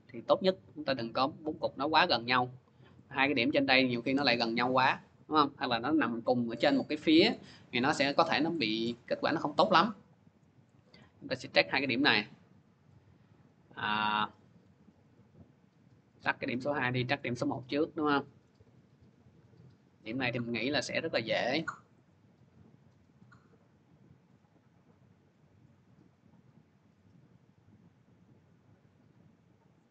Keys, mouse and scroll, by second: 0.7 click, 1.9 click, 2.4 scroll up 2, 3.1 middle click, 3.2 middle click, 8.7 middle click, 8.9-9.2 scroll, 10.1 scroll, 10.9-11.2 scroll, 12.8 click, 14.1 click, 15.0 click, 16.3 click, 17.0 middle click, 17.3 middle click, 18.4 middle click, 18.4-19.0 scroll, 19.9 click, 21.3 click, 21.9 click, 23.0 click, 27.9 click, 29.6 click.